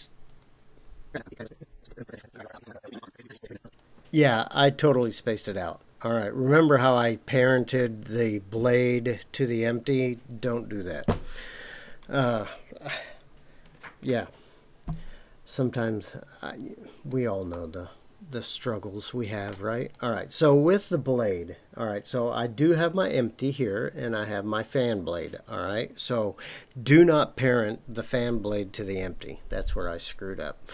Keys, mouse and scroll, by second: 1.1 scroll down 18, 1.2 scroll up 15, 1.5 scroll down 5, 1.5 scroll down 1, 1.7 click, 1.8 scroll down 8, 1.9 scroll up 6, 2.1 shift+s, 2.3 middle click, 2.4 scroll down 4, 2.7 click, 2.8 click, 3.0 click, 3.5 r, 3.5 z, 3.7 Escape, 17.0-17.5 scroll down 1, 17.5-19.5 middle drag, 19.7-22.1 scroll down 2, 23.0 click, 24.6 click.